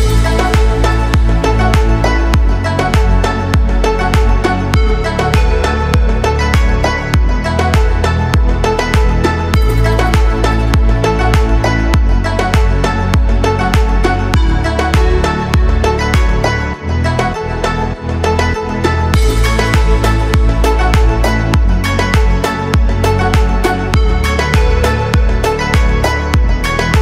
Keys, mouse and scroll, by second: 0.0-5.9 drag, 3.0 b, 9.1-9.8 scroll up 3, 9.8-10.4 shift+middle drag, 10.8 Tab, 11.2-12.4 scroll up 1, 12.4 2, 12.9 click, 13.2 alt+click, 15.4 click, 16.5 s, 16.7 z, 17.2 0, 17.8 click, 18.6-21.5 drag, 23.5 click, 24.7 click, 25.0 alt+click, 25.9 s, 26.0 z, 26.6 0, 26.9 Return.